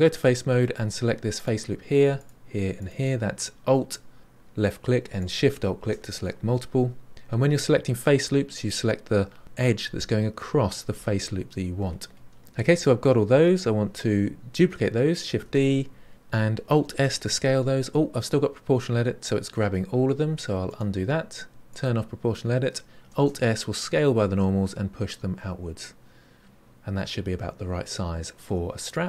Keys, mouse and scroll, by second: 0.0 3, 1.3 alt+click, 2.2 alt+shift+click, 2.8 alt+shift+click, 5.1 alt+shift+click, 15.4 shift+d, 16.1 click, 16.9 alt+s, 21.6 click, 23.1 alt+s.